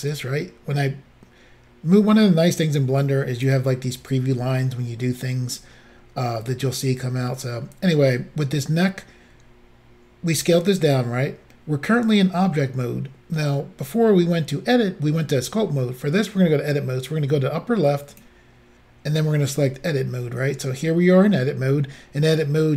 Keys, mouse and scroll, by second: 0.1 click, 18.1 click, 19.5 click.